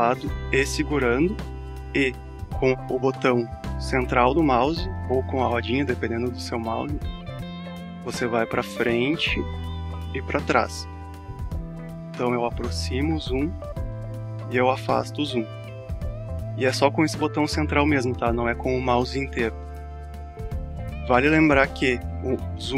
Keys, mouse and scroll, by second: 1.2 alt+click, 8.9 alt+scroll up 1, 10.5-11.1 alt+scroll down 1, 12.4-12.7 alt+scroll up 1, 14.3-14.6 alt+scroll down 1.